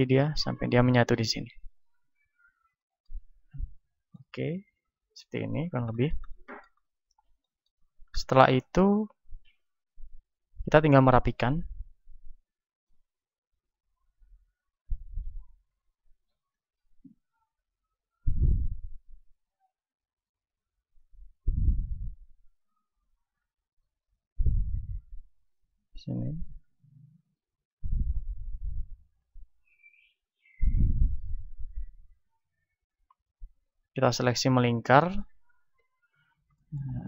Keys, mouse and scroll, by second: 1.3-3.2 drag, 2.9-10.9 middle drag, 8.8 a, 10.2 b, 11.8 r, 12.7-20.0 drag, 15.7-20.0 right drag, 22.0-23.7 drag, 31.1 right click, 32.4-35.7 drag, 32.4-35.7 right drag, 35.7-37.0 middle drag, 35.7 KP_1.